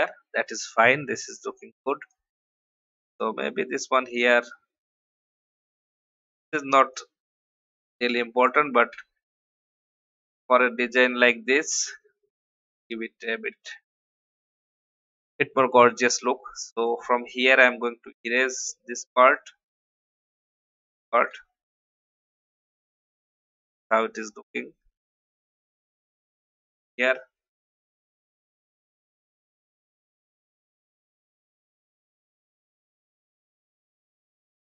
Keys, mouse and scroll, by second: 4.2 alt+shift+click, 5.4 alt+scroll up 1, 6.9-8.2 drag, 8.9 Up, 9.1 Up, 10.4 shift+click, 12.1 shift+Left, 12.9 shift+Right, 13.5 shift+Up, 13.7 shift+Left, 16.1-16.6 alt+scroll up 2, 17.0 shift+e, 17.5 alt+click, 21.3 alt+v, 21.6-21.9 alt+scroll down 1, 23.2 click, 24.4 alt+click, 26.7 ctrl+r, 27.8 click, 28.5 alt+scroll up 1, 29.6 shift+Left, 30.4 shift+Right, 30.6 shift+Right, 30.7 shift+Right.